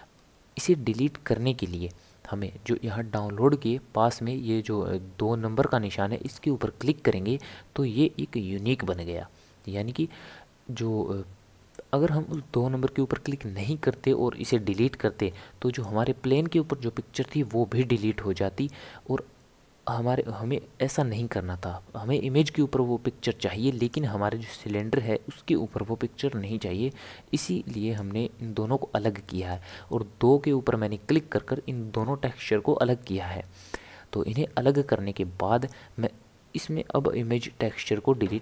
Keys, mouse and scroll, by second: 6.2-9.3 drag, 11.7-14.5 drag, 15.7 click, 23.8 click, 27.4-30.4 drag, 33.7 click, 35.6 click, 38.1 Delete.